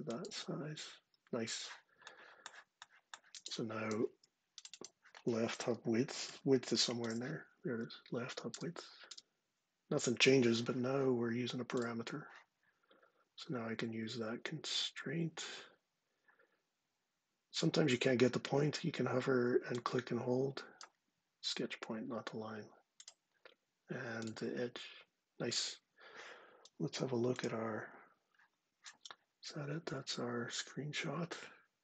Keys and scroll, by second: 3.8 ↻, 5.8-6.6 typing, 7.4 Down, 8.2 Return, 8.8 Return.